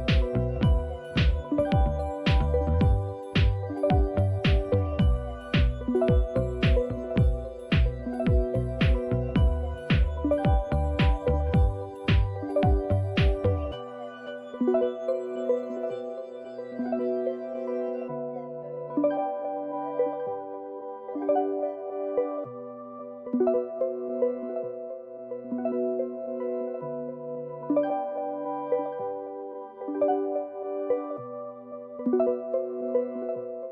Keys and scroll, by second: 0.4 typing, 2.0 Tab, 2.0 typing, 2.8 Return, 5.0-5.8 typing, 6.8-11.3 typing, 12.9-16.1 typing, 17.9-24.0 typing, 25.8-29.0 typing, 30.8 typing.